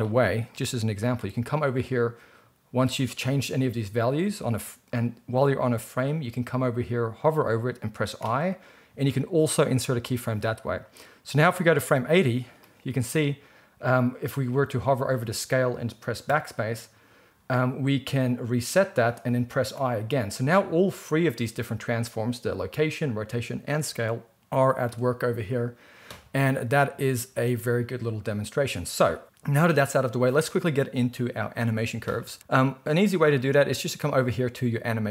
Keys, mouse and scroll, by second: 11.2-35.1 drag, 16.2 BackSpace, 19.7 i, 25.3 space, 27.2 space.